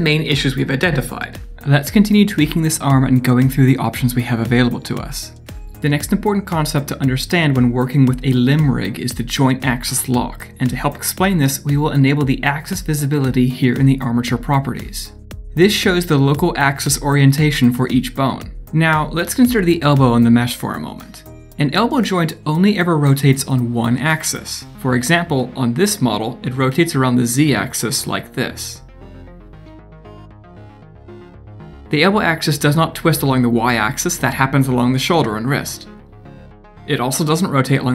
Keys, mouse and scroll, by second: 0.2 middle click, 4.5 scroll up 1, 4.8 shift+middle click, 5.4 scroll up 1.